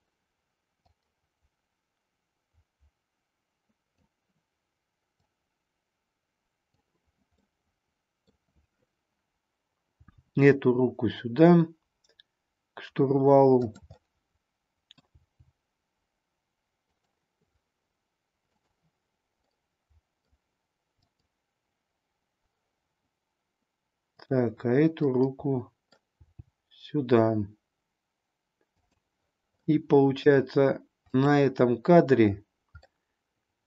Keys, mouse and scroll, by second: 1.0-4.1 drag, 5.2-6.7 drag, 7.4-8.2 middle drag, 10.0 g, 13.6 click, 14.0 middle click, 15.2 g, 16.9 click, 18.5 click, 19.5 scroll up 2, 19.6-20.5 middle drag, 21.0 click, 24.1 click, 25.0-26.0 middle drag, 26.2 g, 29.6-30.4 middle drag, 31.0 click, 32.8 scroll up 1, 33.1-33.6 middle drag.